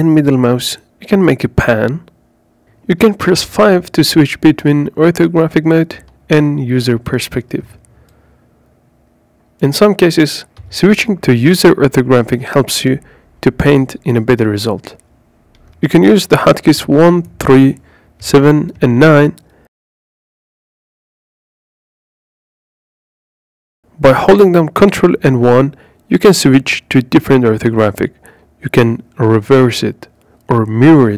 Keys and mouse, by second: 3.2 KP_5, 4.8 KP_5, 5.8 KP_5, 6.6 KP_5, 12.0 KP_5, 16.3 KP_1, 18.1 KP_3, 19.3 KP_4, 21.2 KP_7, 21.7 KP_9, 23.8 ctrl+KP_1, 25.8 ctrl+KP_3, 30.9 KP_7, 30.9 KP_9, 30.9 ctrl+KP_1.